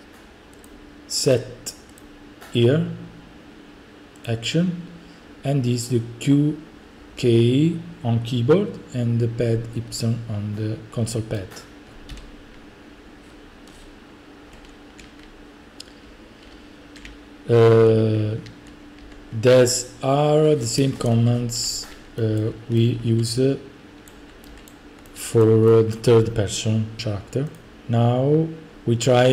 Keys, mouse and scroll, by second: 1.1 click, 1.8 click, 2.9 click, 4.5 click, 10.9 click, 11.4-17.6 typing, 11.9 right click, 22.2-22.9 typing, 24.1-25.2 typing, 24.4 right click, 24.7 right click, 25.5 right click, 26.0 right click, 27.6 click, 27.7 Delete, 27.7 right click, 28.7 click.